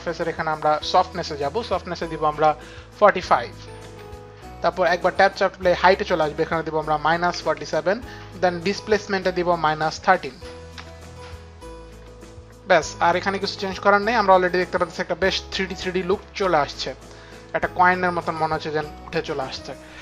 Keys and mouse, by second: 11.2 Return, 11.4 KP_3, 11.4 KP_1.